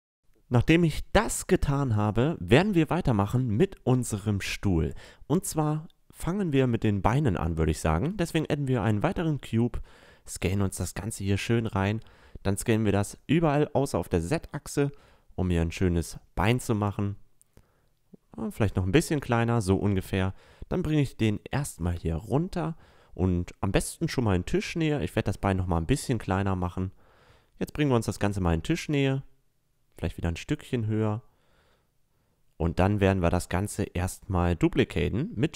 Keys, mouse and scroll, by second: 0.3-1.6 middle drag, 3.3 a, 6.1 click, 6.9 s, 8.0-8.5 drag, 9.1 click, 9.5 s, 11.2 s, 18.0-19.3 middle drag, 19.3-21.2 drag, 22.4 s, 25.6-28.6 drag, 27.4 s, 29.1-30.8 drag, 31.1 middle click, 32.5 shift+d, 33.4-35.3 drag.